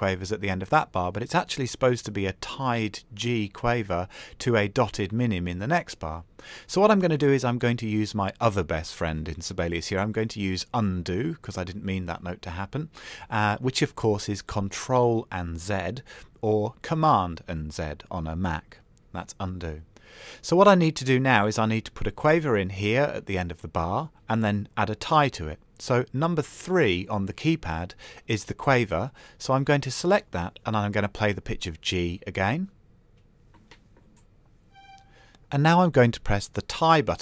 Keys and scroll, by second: 30.2 KP_3.